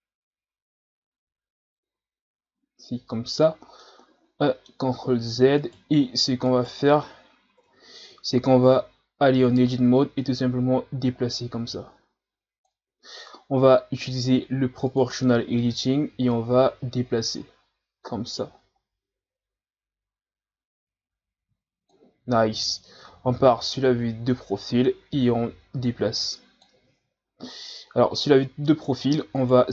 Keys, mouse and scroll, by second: 1.0 ctrl+z, 1.5 ctrl+z, 2.0 ctrl+z, 2.9 ctrl+z, 3.8-5.6 middle drag, 5.6 right click, 6.5 right click, 7.6 KP_1, 8.4 Tab, 9.4 right click, 10.2-12.9 drag, 12.9 ctrl+z, 14.9 click, 16.3-19.3 drag, 22.9 KP_3, 25.8-26.9 drag, 26.9 ctrl+z, 27.6-29.4 middle drag, 29.4 right click.